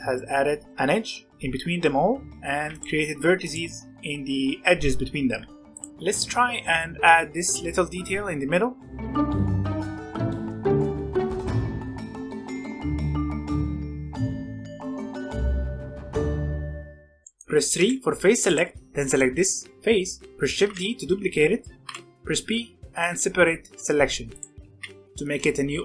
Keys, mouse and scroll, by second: 0.7-2.5 shift+middle drag, 2.5 alt+a, 2.6 click, 3.3 click, 5.8 j, 6.1 alt+a, 8.8 middle click, 9.0 ctrl+r, 9.1 middle click, 9.6 alt+click, 9.7-11.1 typing, 9.9 middle click, 10.1 alt+shift+click, 10.3 middle click, 12.2 middle click, 12.4 c, 12.9 shift+middle click, 13.2 e, 13.9 s, 14.2 s, 14.8 middle click, 15.1 scroll down 1, 15.2 middle click, 15.5 Tab, 15.6 middle click, 15.7 scroll up 2, 15.8-16.2 scroll down 2, 15.9 middle click, 16.2 middle click, 17.0 scroll up 1, 17.2 middle click, 17.8 3, 18.4 click, 19.0-20.5 shift+middle drag, 20.5 shift+d, 21.8 p, 23.9 Tab, 24.3 click, 24.6 g.